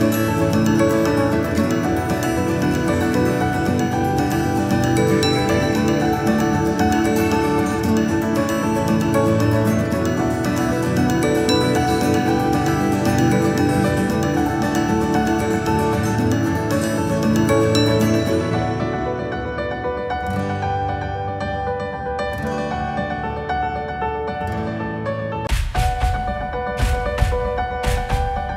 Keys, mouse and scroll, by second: 1.2-3.5 drag, 3.5 KP_8, 3.6 KP_8, 4.5 e, 6.3 s, 7.5-9.4 drag, 10.1 KP_1, 10.8 KP_8, 11.5 e, 13.8 s, 14.7 click, 15.4 KP_8, 15.7-17.2 KP_6, 17.6 click, 18.2 KP_1, 19.6 s, 21.5 e, 22.8 s, 24.1-24.5 KP_4, 25.1 KP_8, 25.1 KP_8, 25.8-26.6 KP_4, 26.9-28.5 drag.